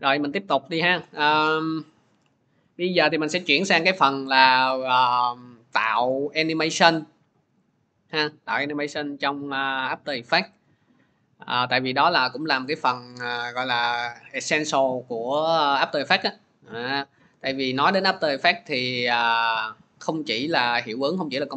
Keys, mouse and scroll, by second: 0.2 click, 6.8 click, 10.2-12.4 middle drag, 12.4-14.2 drag, 14.2 middle click, 17.1 click.